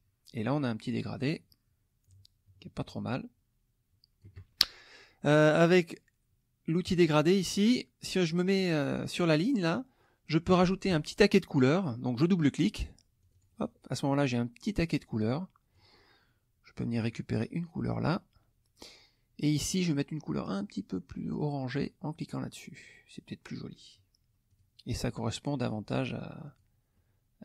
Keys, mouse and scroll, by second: 1.1-4.4 shift+drag, 6.9 click, 13.2 click, 14.7-15.9 drag, 17.0 click, 18.0 click, 19.5 click, 21.7 click, 24.5 click, 25.1 middle click, 26.4 click, 26.9 middle click, 26.9 scroll up 1.